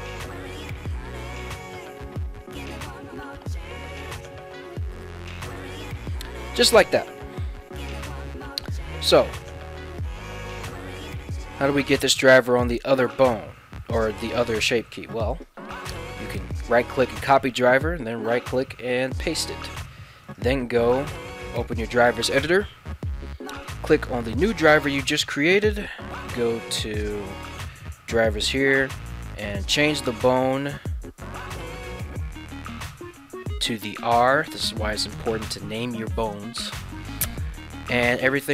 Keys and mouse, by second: 0.1 g, 5.6 right click, 10.2 ctrl+Tab, 10.5 right click, 15.4-16.6 right drag, 17.6-19.2 right drag, 20.3-21.6 right drag.